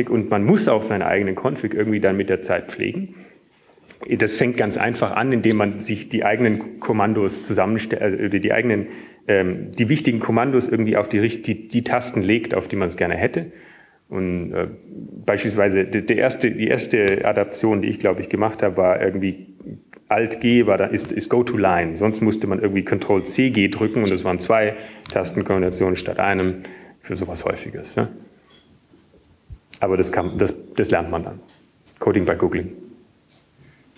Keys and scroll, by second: 22.5 ctrl+g, 24.0 alt+g, 29.7 ctrl+g.